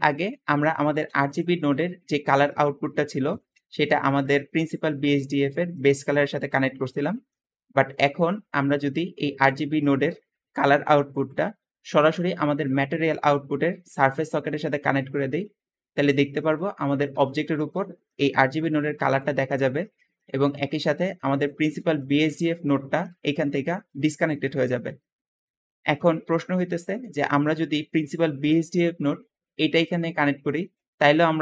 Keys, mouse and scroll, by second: 0.8 g, 3.2 Escape, 3.2 Escape, 7.0 Escape, 7.0 middle click, 7.6 click, 17.8 `, 19.8 Escape, 20.1 middle click, 21.5 g, 22.7 g, 23.9 click, 25.4 Escape, 25.4 Escape, 25.6 middle click.